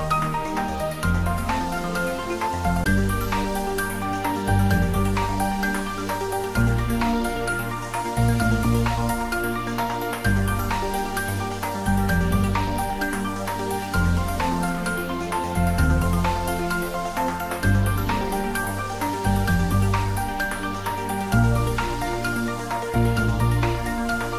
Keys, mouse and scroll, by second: 0.8 alt+shift+click, 2.0-6.4 middle drag, 6.4 alt+shift+click, 9.3 alt+shift+click, 9.6 ctrl+z, 11.6 alt+shift+click, 14.4 ctrl+z, 17.3 alt+shift+click, 21.3 alt+shift+click.